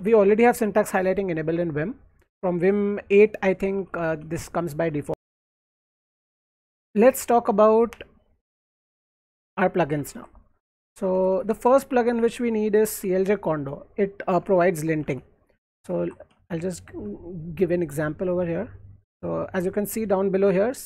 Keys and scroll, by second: 0.0-0.6 typing, 0.7 Escape, 3.5-5.4 typing, 10.0 alt+Left, 10.5-12.1 typing, 14.4 alt+Tab, 15.0 alt+Tab, 16.0 alt+Right, 16.9-18.4 typing.